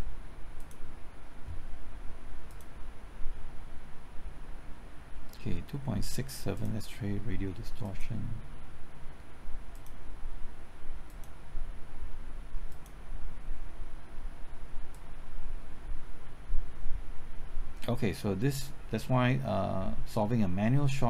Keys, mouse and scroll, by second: 0.5-21.0 drag.